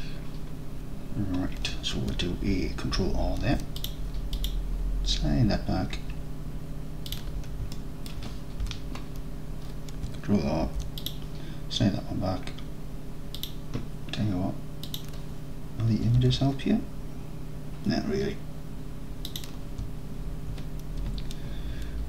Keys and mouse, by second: 3.4 ctrl+r, 7.2 click, 7.9 alt+click, 8.7 KP_3, 10.7 ctrl+r, 13.4 click, 16.2 alt+z, 19.4 middle click.